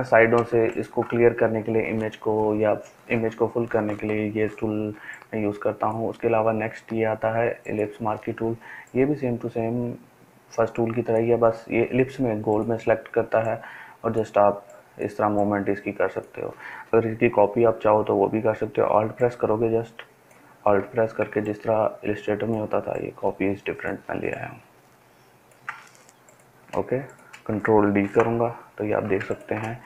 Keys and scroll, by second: 0.5 ctrl+space, 28.0 ctrl+d.